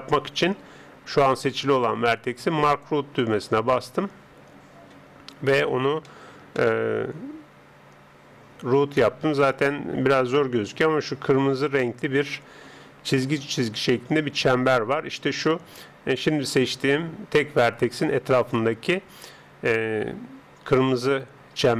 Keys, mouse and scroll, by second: 2.7 click, 6.1-9.2 middle drag.